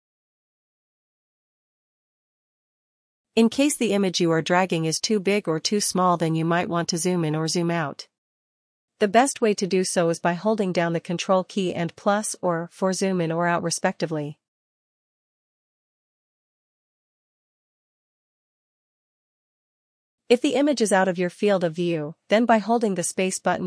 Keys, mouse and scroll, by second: 3.7 click, 4.3 ctrl++, 4.7 ctrl++, 7.5 click, 9.3 click, 11.1 ctrl+z, 12.5 click, 14.4 click, 15.4 click, 16.4 ctrl+t, 20.6 shift+click, 21.0 shift+click, 21.8 ctrl+z.